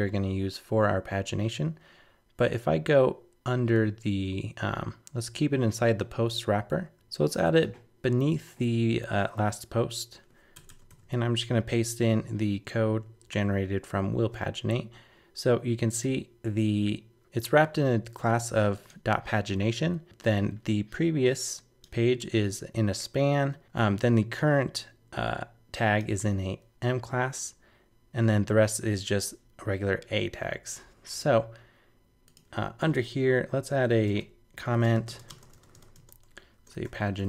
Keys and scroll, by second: 6.9 super+BackSpace, 10.9 super+v.